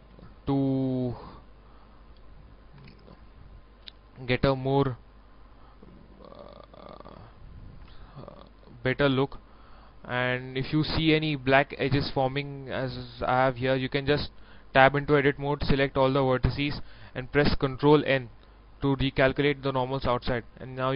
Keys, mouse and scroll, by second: 0.0 a, 0.9 click, 1.8 Tab, 2.5 scroll down 1, 2.9 middle click, 3.6 scroll down 1, 3.9 middle click, 5.1 right click, 7.0 Tab, 7.5 middle click, 8.1-8.4 scroll up 1, 9.0-10.5 middle drag, 10.9 Tab, 15.3 a, 17.6 ctrl+n, 19.1 click, 19.7 middle click.